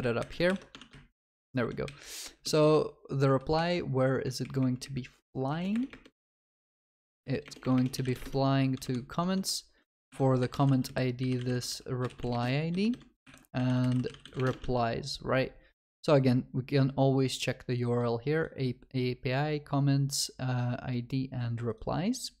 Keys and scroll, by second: 0.5 ctrl+v, 0.5 ctrl+y, 5.6 ctrl+BackSpace, 10.1 ctrl+Delete, 14.6 ctrl+Delete, 14.7 ctrl+s.